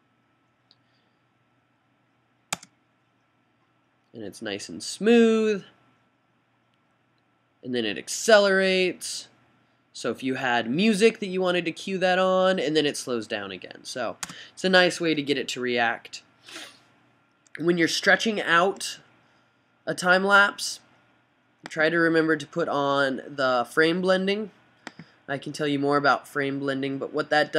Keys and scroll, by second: 14.5 s.